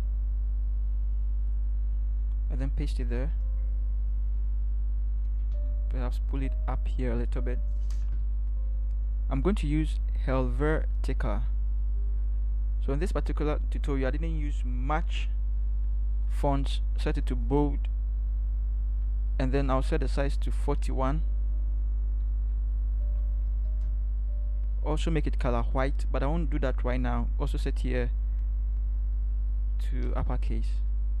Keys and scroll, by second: 2.7 ctrl+v, 5.7 v, 22.3 4, 23.0 1, 23.7 Return.